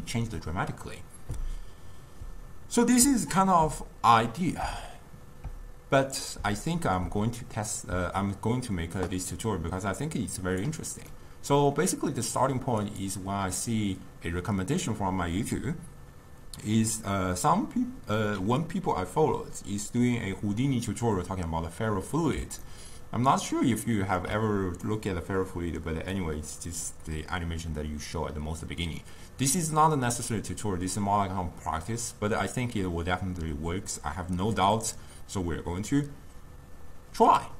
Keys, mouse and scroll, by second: 22.7-37.5 ctrl+middle drag.